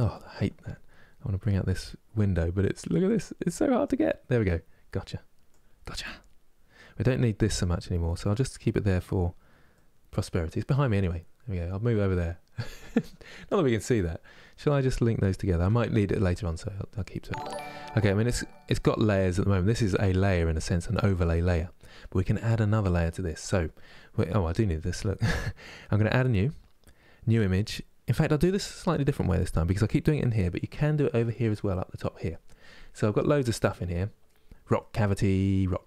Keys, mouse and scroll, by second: 3.8-35.8 drag.